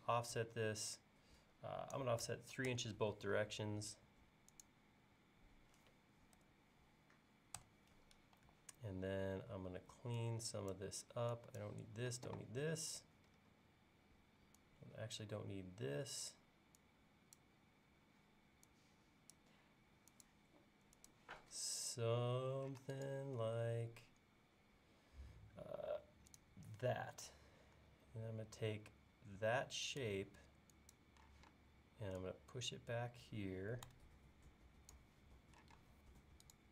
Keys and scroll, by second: 0.0 f, 2.3 3, 2.7 Return, 6.4 3, 7.6 Return, 29.6 e, 31.4 p, 35.8 space.